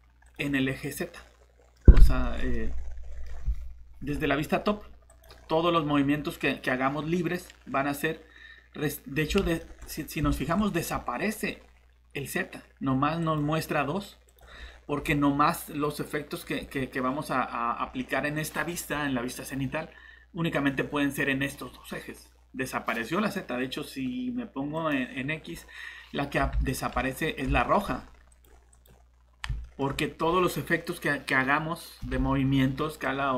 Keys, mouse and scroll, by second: 0.2 click, 1.1 middle click, 1.8 scroll up 1, 2.2 middle click, 5.1 click, 9.2 scroll up 1, 9.6 middle click, 9.8 scroll up 1, 10.3 middle click, 13.2 click, 14.5 scroll down 1, 18.2-18.6 scroll up 1, 20.5 click, 26.2 scroll up 1, 26.6 middle click, 26.9 scroll up 1, 27.3 click, 27.6 middle click, 27.8 scroll up 1, 28.3 click, 29.6 middle click, 29.9 scroll down 1, 33.0 click.